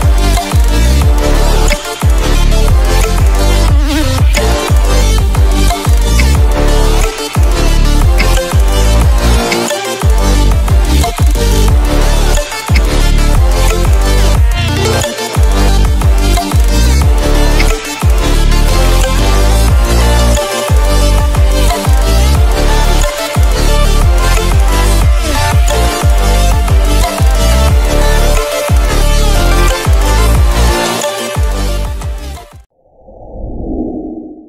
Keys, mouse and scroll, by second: 1.6 Delete, 3.0-3.8 click, 4.3 Delete, 5.8 click, 6.1 Delete, 7.7 click, 7.9 click, 8.1 Delete, 9.4 v, 9.6 click, 12.6 click, 12.7 a, 13.4-16.3 drag, 17.5 v, 18.1 click, 19.7 right click, 21.1-22.6 drag, 26.6-30.5 drag.